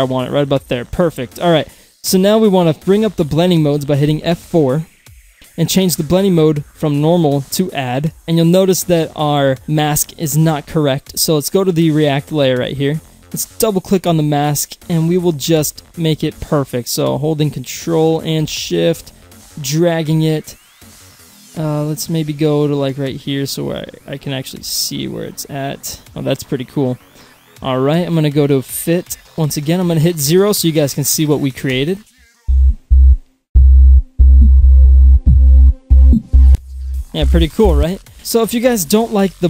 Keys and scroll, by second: 4.1 F4, 32.4 0, 37.8 0.